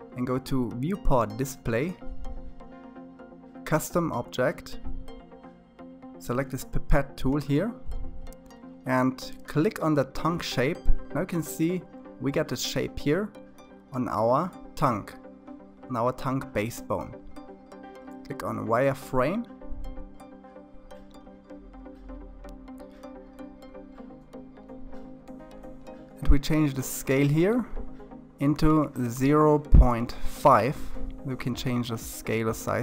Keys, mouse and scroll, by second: 6.1 click, 16.4 click, 29.3 click, 29.9-32.6 shift+middle drag, 32.6 click.